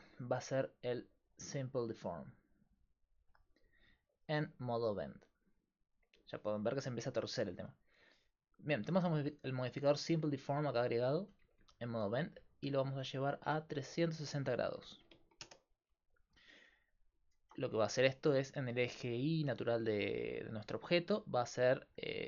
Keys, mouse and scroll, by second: 3.8-5.1 middle drag, 5.1-7.7 drag, 7.8-9.4 drag, 13.1-16.7 drag, 19.0-22.2 middle drag.